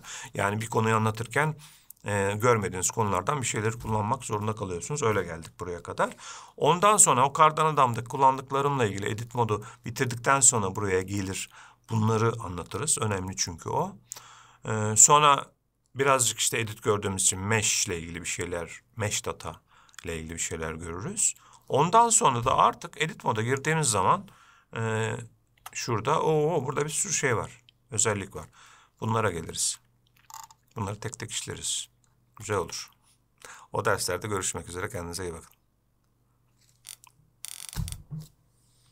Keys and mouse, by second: 24.0-25.9 drag, 25.9 Tab.